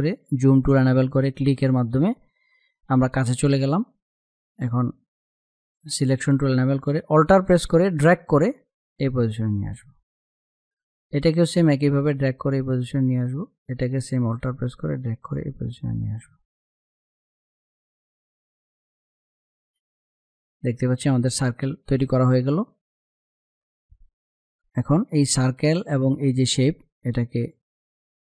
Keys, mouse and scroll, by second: 0.2 space, 0.4 click, 0.8 space, 4.9-13.2 drag, 13.2-16.0 alt+drag, 16.2 click, 18.2 ctrl+-, 19.9 ctrl+=, 24.1 click.